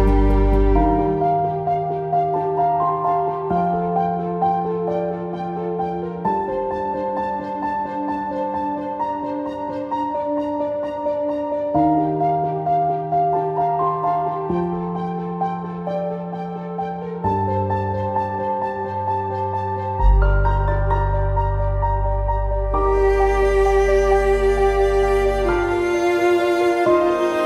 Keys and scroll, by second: 2.8 ctrl+z.